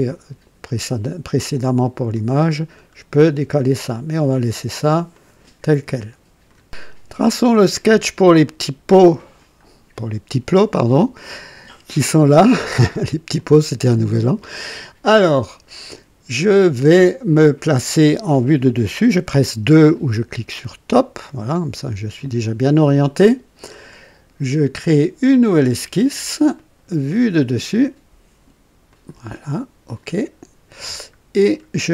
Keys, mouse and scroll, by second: 1.8-2.7 scroll down 3, 2.8-3.4 scroll up 2, 5.1 click, 5.9 click, 8.4 click, 10.7 click, 13.3 click, 21.2 click, 26.5 click, 28.8 click, 29.8 click, 31.0 scroll up 1, 31.8 right click.